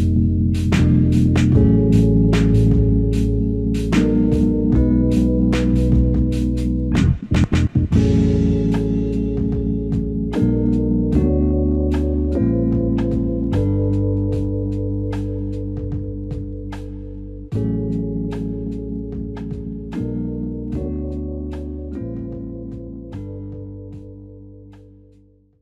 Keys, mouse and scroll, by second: 1.3 shift+click, 2.3 r, 14.9 alt+click, 16.8 alt+click, 22.9 alt+click.